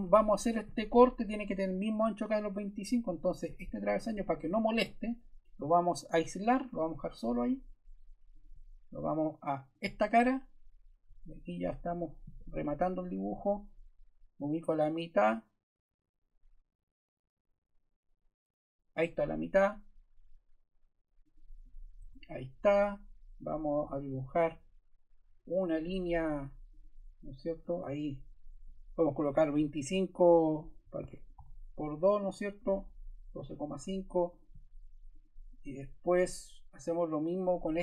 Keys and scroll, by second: 21.9 Escape, 29.2 2, 29.5 5, 30.7-32.1 typing, 32.2 Return.